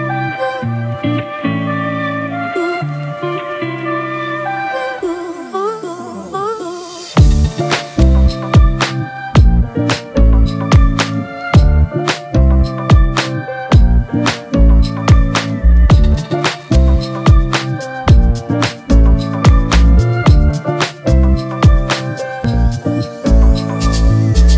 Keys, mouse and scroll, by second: 8.5-10.0 typing, 14.6 double click.